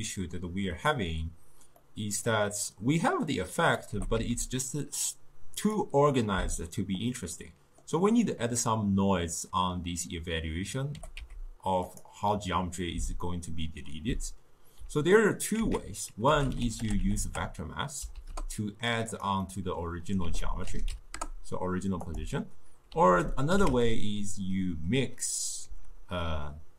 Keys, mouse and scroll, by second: 1.8-3.6 middle drag, 3.6 click, 4.0 g, 7.4-10.5 middle drag, 11.0 g, 15.6 ctrl+a, 19.5-20.3 middle drag, 20.3 ctrl+a, 23.1 ctrl+a.